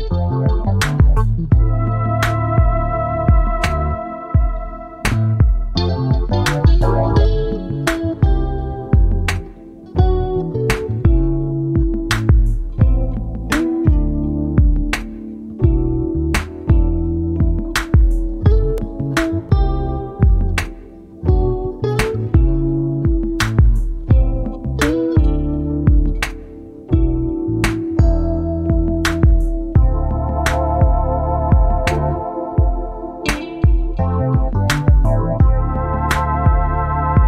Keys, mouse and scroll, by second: 0.7 click, 2.5 click, 3.7 ctrl+d, 4.7-6.3 ctrl+drag, 7.3-8.8 ctrl+shift+drag, 9.5-11.9 ctrl+drag, 12.6-14.7 drag, 16.0 click, 18.6-20.7 drag, 22.5 click, 23.1 click, 24.1 click, 25.0 click, 26.7 click, 27.6 click, 29.2 click, 29.8 click, 30.9 click, 31.6-32.1 ctrl+scroll up 2, 35.3 click, 35.8 click, 36.7 shift+click.